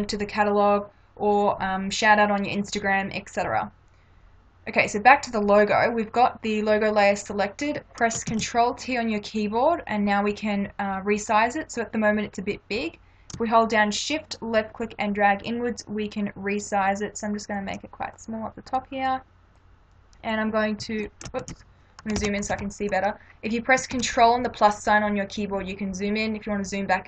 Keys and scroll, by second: 8.3 ctrl+t, 21.4 ctrl+z, 22.2 ctrl+=, 24.0 ctrl+=.